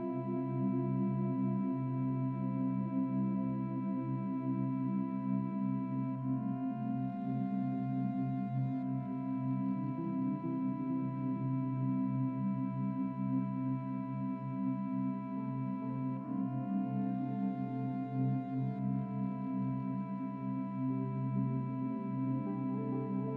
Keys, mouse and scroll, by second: 0.5 shift+click, 1.5 KP_Decimal, 7.4-7.7 scroll up 1, 7.7-9.4 middle drag, 9.8 Tab, 10.1-10.7 scroll down 2, 10.7 middle click, 11.6 scroll down 3, 11.9 shift+middle click, 12.8 click, 15.1 shift+d, 16.1 click, 17.9 shift+middle click, 17.9 click, 18.3-18.6 scroll up 3, 18.6-20.0 middle drag, 20.0 click, 22.1 click.